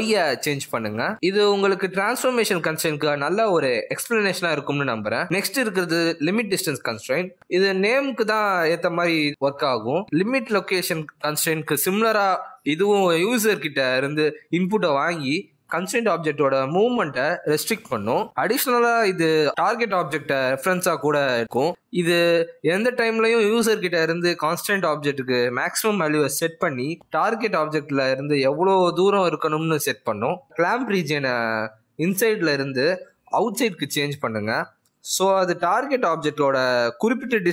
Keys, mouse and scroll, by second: 2.8 click, 3.2-3.8 scroll down 3, 3.4 middle click, 3.8 g, 5.6 g, 6.0 g, 7.0 click, 7.6 click, 8.0 click, 10.7 click, 15.5 click, 18.4 middle click, 19.3-19.8 scroll up 3, 19.9 shift+middle click, 20.4 middle click, 23.4 g, 27.9-28.4 scroll down 4, 28.1 middle click, 28.5 g, 31.8 middle click, 32.4-32.7 scroll up 3, 33.7 click, 35.6 scroll down 1, 35.7 middle click, 36.3 g.